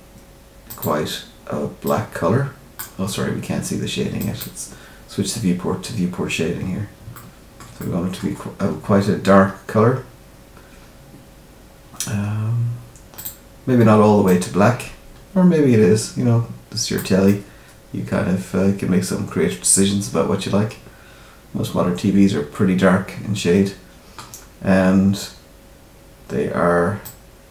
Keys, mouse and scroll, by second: 0.6 click, 4.2 click, 6.5-7.0 scroll up 2, 7.1 shift+middle click, 7.7 middle click, 8.3 scroll down 2, 13.1 click, 17.2 middle click, 27.0 click.